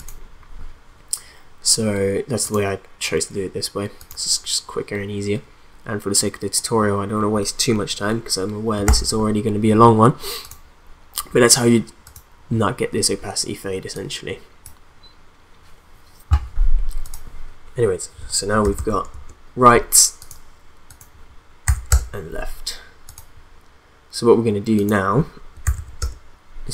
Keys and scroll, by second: 8.8 ctrl+s, 18.6 0, 19.1 Return, 21.6 0, 21.9 Return, 25.3-26.1 typing.